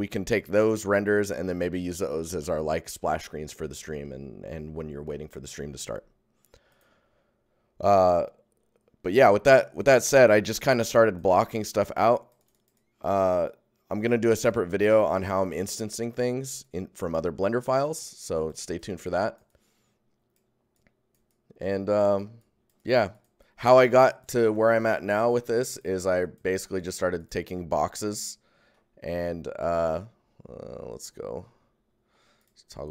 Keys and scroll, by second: 27.4 shift+g.